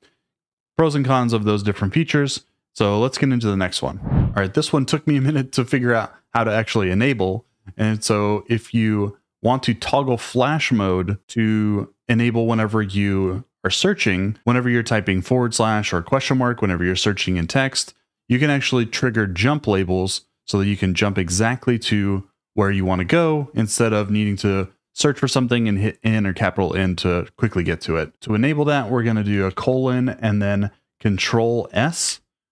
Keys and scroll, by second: 5.1 typing, 29.5 shift+;.